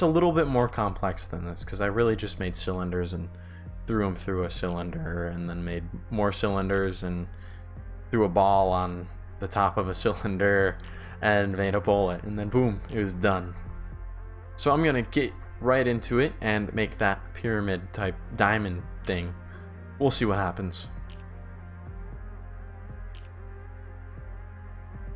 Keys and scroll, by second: 0.6 shift+w, 2.0 shift+a, 2.3 shift+d, 4.0 shift+d, 5.4 shift+a, 6.8 shift+a, 7.6 shift+d, 10.6 shift+s, 11.6 shift+w, 13.5 shift+s, 15.6 shift+s, 21.2 shift+d, 21.2 Pause, 22.3-25.1 typing.